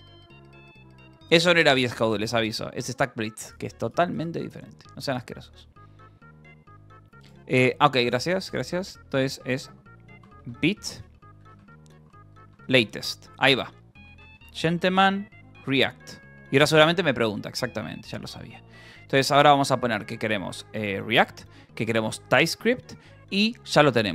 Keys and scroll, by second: 8.4-15.5 typing, 15.9 Return, 17.9 ctrl+n, 18.6 Up, 18.9 Down, 20.8 Return, 21.6 Down, 22.1 Return.